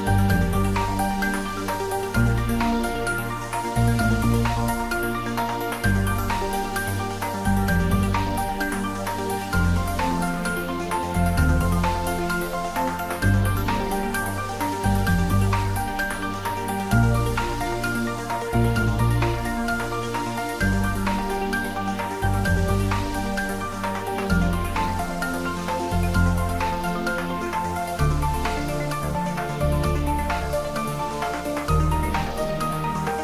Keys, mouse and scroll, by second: 2.1-2.4 scroll up 1, 3.0 middle click, 3.7 e, 6.6 click, 6.9-8.0 scroll up 1, 8.5 ctrl+r, 10.2 click, 11.5 ctrl+z, 12.8 ctrl+z, 13.8 ctrl+z, 14.4 ctrl+z, 15.2-16.5 middle drag, 16.5 shift+a, 18.8 click, 19.6-20.0 scroll down 1, 20.3 middle click, 20.7-21.3 scroll up 1, 21.3-22.2 typing, 23.8 click, 24.2-25.7 scroll up 1, 25.7 click, 26.7 scroll up 1, 28.1 scroll down 1, 28.7 middle click, 29.9-30.3 scroll up 1, 30.6 middle click, 31.2 s, 31.9 click.